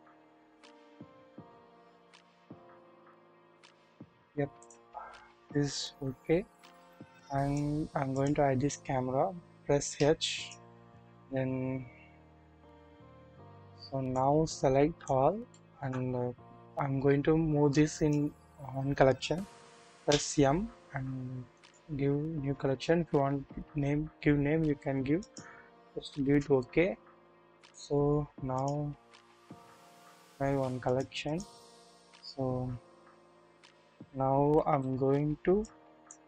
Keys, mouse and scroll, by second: 1.1-3.4 typing, 5.5-7.6 middle drag, 8.1 middle click, 9.9-10.9 typing, 10.3 click, 11.9-12.2 scroll down 1, 12.2 typing, 14.2-15.2 middle drag, 15.5-15.9 shift+middle drag, 17.7 middle click, 20.0 typing, 28.5 click, 29.7 double click, 30.8 click, 31.2 click, 32.2-33.2 scroll up 1, 33.4 KP_1, 34.7 KP_3, 35.6 click.